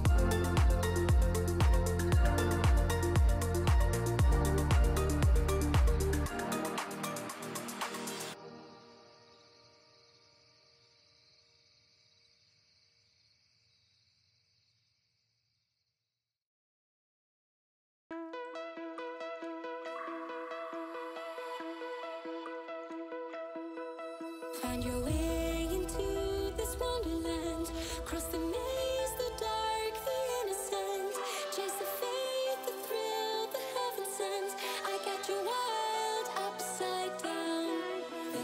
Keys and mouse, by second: 1.3 click, 2.5 KP_Decimal, 3.0 KP_7, 3.7 Tab, 3.9 1, 4.2 s, 6.5 KP_1, 7.7 e, 9.5 a, 9.8 s, 11.0 2, 12.8 f, 12.9 a, 13.6 shift+n, 13.8 Tab, 14.4 middle drag, 15.0 shift+middle drag, 15.4 middle click, 15.9 ctrl+3, 16.4-16.9 right drag, 16.9 Tab, 17.2 middle click, 17.5 3, 17.8 right click, 20.1 ctrl+b, 23.9 Tab, 24.1 drag, 25.5 ctrl+p, 26.7 KP_0, 27.3 KP_0, 27.7 KP_7, 28.5 g, 30.2 KP_0, 31.5 click, 32.6 r, 34.8 r, 35.9 r.